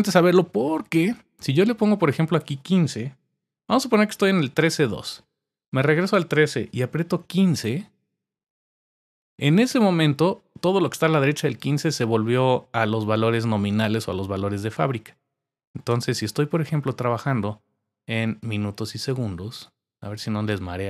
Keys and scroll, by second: 4.2 Right, 4.5 Up, 5.0 Left, 8.9-9.7 typing.